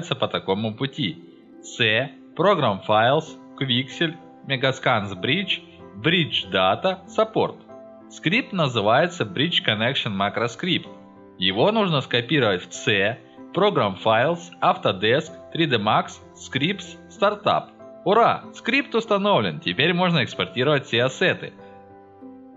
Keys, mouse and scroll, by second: 0.6 click, 2.3 click, 3.4 scroll down 2, 3.9 middle click, 4.8 click, 5.4 click, 6.3 click, 7.2 click, 13.4 click, 14.8 click, 14.9 click, 15.8 click, 16.5-17.5 drag, 17.5 right click, 18.1-19.5 drag, 20.3 click, 21.3 scroll down 2, 21.5 scroll up 2, 21.8-22.5 drag, 21.8-22.5 middle drag.